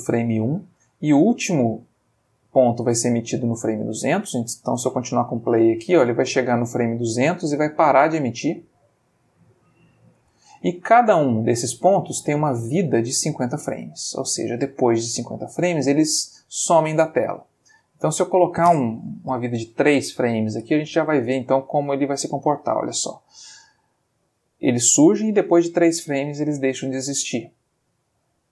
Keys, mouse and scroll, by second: 4.7 space, 10.1 space, 18.1 click, 19.4 3, 19.5 Return, 20.5 space, 27.6 click.